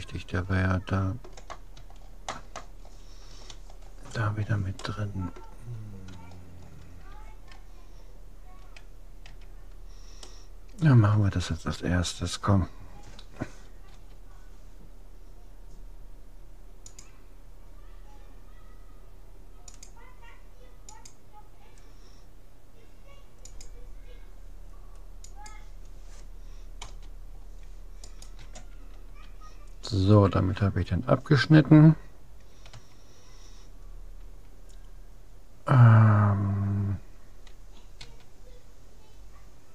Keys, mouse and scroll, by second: 0.6 click, 2.0 middle click, 3.7-4.8 scroll up 1, 5.0-8.4 middle drag, 8.4-9.4 scroll up 1, 9.4 a, 10.2-11.4 middle drag, 11.4 click, 14.0 k, 28.0-29.8 right drag, 32.8 a, 38.0 s.